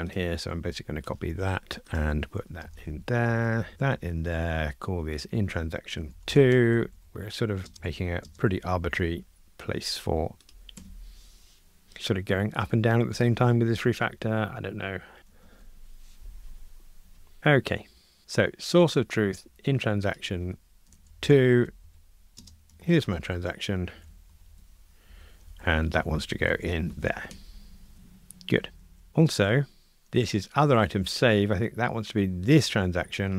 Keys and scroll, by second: 2.0 super+c, 2.7 super+v, 6.5 Escape, 10.8 Escape, 15.3 ctrl+r, 25.9 alt+shift+Left.